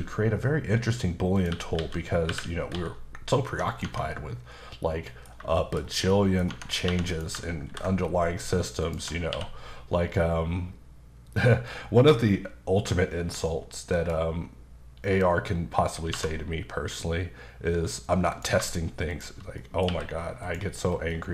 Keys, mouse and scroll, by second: 1.3 click, 1.5-2.7 typing, 3.8 Tab, 4.1 middle click, 5.6 shift+middle click, 5.8 scroll up 2, 6.1 middle click, 6.3 scroll, 6.4 scroll down 1, 6.5 Tab, 6.9 2, 7.1 click, 7.7 ctrl+b, 8.8 click, 9.0 Tab, 9.3 q, 13.9 click, 16.1 2, 18.3 click, 19.1 shift+click, 19.6 middle click, 19.9 q, 20.4 click, 20.8 scroll down 1, 21.1 middle click.